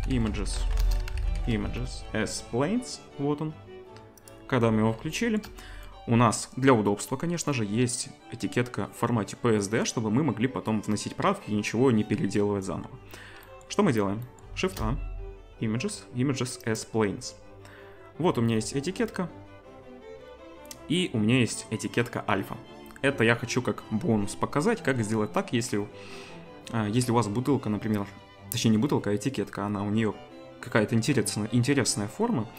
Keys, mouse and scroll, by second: 5.1 shift+middle drag, 14.6 shift+a.